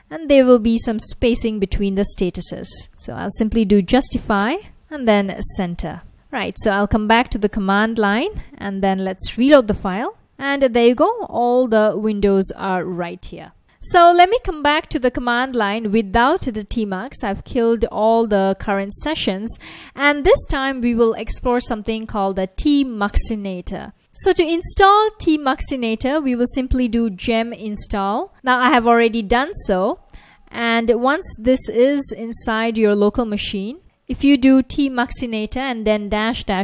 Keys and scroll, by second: 0.0-6.6 typing, 8.7 ctrl+a, 9.2 r, 10.8 F1, 16.9 F1, 18.5 typing, 24.7-28.8 typing, 29.5 ctrl+c, 30.7-36.6 typing.